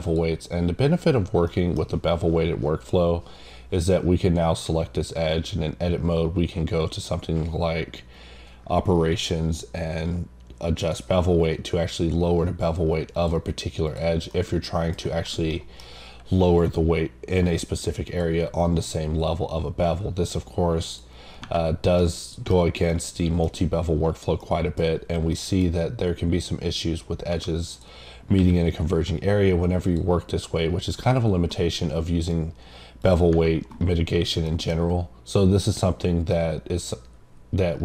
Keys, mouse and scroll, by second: 0.0 click, 1.5 middle click, 1.6 scroll down 1, 10.8 click, 14.3 middle click, 15.5 middle click, 18.2 click, 20.8 click, 22.0 middle click, 22.9 middle click, 24.7 middle click, 25.3 middle click, 27.7 click, 29.8 click, 33.0 click, 34.5 middle click, 34.7 scroll up 2, 36.0 scroll down 1, 36.3 middle click.